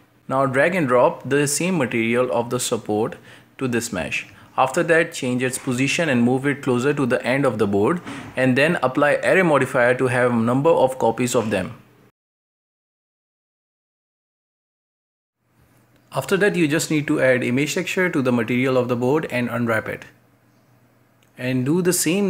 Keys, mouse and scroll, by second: 0.0-0.5 shift+middle drag, 0.5 right click, 1.3 click, 2.2 middle click, 2.4 scroll down 2, 3.0-5.0 right drag, 5.0 click, 5.3-10.8 drag, 11.0 scroll down 1, 11.1-12.2 middle drag, 12.2 scroll up 1, 12.3 shift+middle click, 12.5 Tab, 12.6-15.0 typing, 13.7 scroll down 2, 14.1 middle click, 14.4 shift+middle click, 14.7-15.0 shift+middle drag, 15.1 right click, 15.5 drag, 15.9 click, 16.1 middle click, 16.3 a, 16.5 KP_Decimal, 16.7 middle click, 16.8 scroll up 1, 17.5-17.8 scroll up 6, 19.2 click, 20.3 click, 20.4 scroll up 1, 20.6 Tab, 20.8 a, 21.5 a.